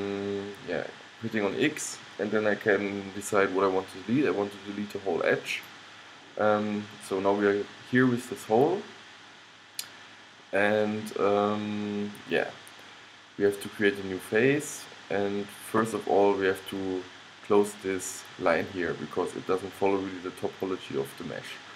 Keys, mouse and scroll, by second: 10.5 middle click, 12.4-13.5 middle drag, 14.3-16.2 middle drag.